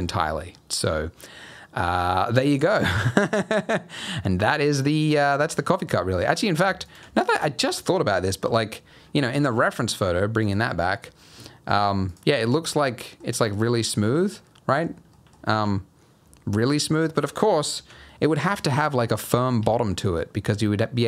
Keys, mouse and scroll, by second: 0.1 scroll down 3, 0.5 middle click, 1.8 scroll down 3, 2.1 middle click, 3.8-4.1 scroll up 3, 4.1 middle click, 5.2 scroll up 1, 5.4 Tab, 5.6 middle click, 5.9-6.6 scroll up 5, 6.8 alt+shift+click, 7.1 scroll down 4, 7.4 middle click, 8.4 KP_3, 8.9-9.3 scroll down 3, 9.3 Tab, 10.4 click, 12.1 click, 12.4 middle click, 13.3 scroll down 2, 13.5 middle click, 14.5 middle click, 14.9 scroll up 2, 15.1 middle click, 15.5 h, 17.7 alt+h, 18.0 middle click, 18.4 click, 18.7 middle click, 18.9-19.3 scroll up 5, 19.3 middle click, 19.6 Tab, 19.9-20.2 scroll down 2, 20.2-20.7 scroll up 2.